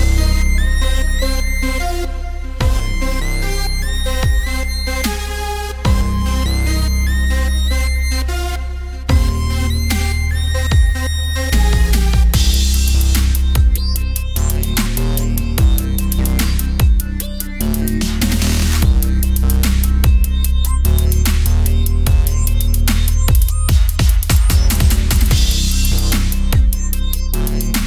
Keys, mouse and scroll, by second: 0.4 click, 1.2 middle click, 1.8 click, 2.8-3.9 drag, 4.1 click, 5.2 r, 6.2 click, 7.5 click, 8.1 middle click, 8.6 alt+s, 9.9 KP_1, 11.1 click, 12.1 alt+s, 13.5 click, 15.6 click, 16.0 alt+s, 17.4 middle click, 18.1 middle click, 19.1 alt+s, 20.9 Tab, 21.3 alt+c, 21.7 Tab, 22.7 Tab, 23.1 Tab, 23.3 a, 23.4 a, 24.1 click, 24.5 middle click, 24.6 click, 25.7 middle click, 26.2 o, 26.3 middle click, 26.7 s.